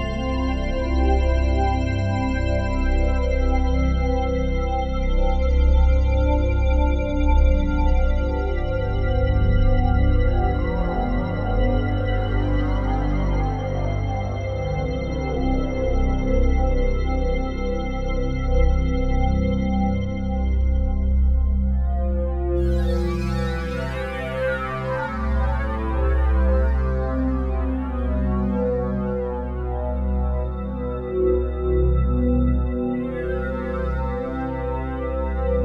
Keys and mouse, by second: 0.0-1.6 typing, 5.1-6.5 drag, 6.5 g, 10.0 g, 11.8 click, 12.3 click, 12.9 click, 13.9 typing, 15.0 click, 15.8-16.1 typing, 17.3 click, 19.0 click, 20.0 typing, 21.1 click, 23.4 click, 24.4 typing, 26.3 click, 27.8 click, 28.4 click, 29.5 typing, 30.5 Escape, 31.0 click, 31.7-32.9 typing, 33.9 click.